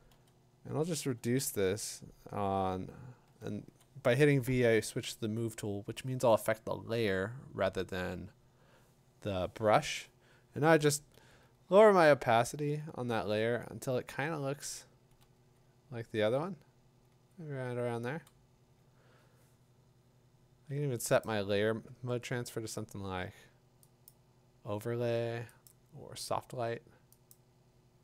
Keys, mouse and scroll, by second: 0.1-1.6 typing, 3.0-3.8 typing, 10.9-12.6 typing, 14.2-18.6 typing, 21.2 click, 24.1 click, 25.7 click, 27.3 click.